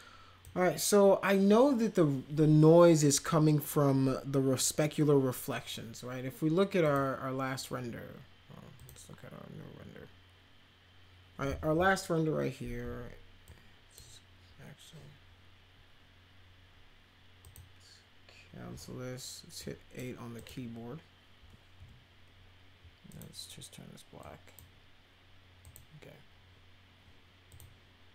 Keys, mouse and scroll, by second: 6.9 click, 8.8 click, 13.5-13.9 drag, 17.4 click, 19.6 click, 20.4 click, 21.8 8, 23.1 click, 24.2-24.6 drag, 25.6 click, 27.5 click.